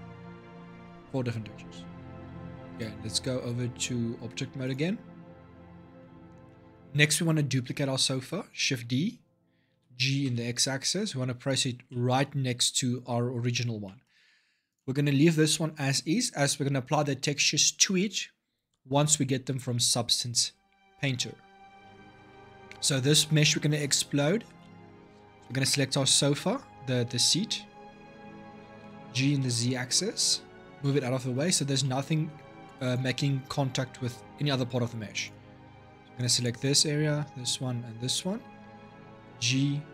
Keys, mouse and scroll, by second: 2.5-5.4 drag, 5.4-5.8 scroll down 2, 5.8-8.5 shift+middle drag, 8.5 shift+d, 11.7-14.5 shift+middle drag, 14.5 click, 21.6-23.5 shift+middle drag, 23.5 click, 24.2 Tab, 24.4 middle click, 25.1 click, 26.0 l, 28.6 g, 30.7-32.6 middle drag, 32.6-34.3 drag, 34.3 l, 35.0 click, 35.8 l, 36.8 l, 37.8 l, 38.9 g.